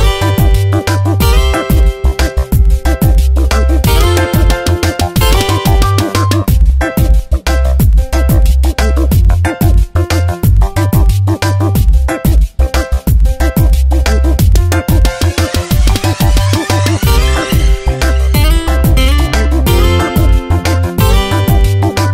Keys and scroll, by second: 12.1 space, 14.2 space, 17.2 space, 19.5 ctrl+z.